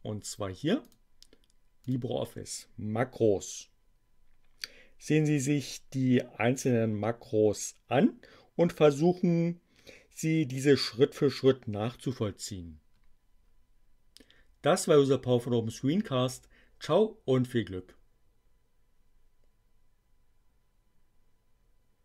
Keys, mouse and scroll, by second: 0.9 click, 1.8 click.